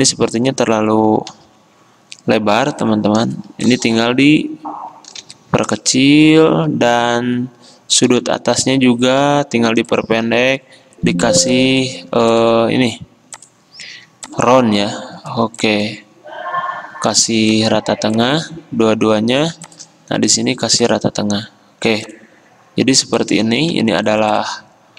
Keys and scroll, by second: 0.0 alt+Left, 0.2 alt+Left, 0.5 alt+Left, 1.4 alt+Right, 1.5 alt+Right, 4.0 a, 5.3 v, 7.1 a, 8.3 v, 9.3 v, 11.1 a, 12.3 v, 19.2 ctrl+g.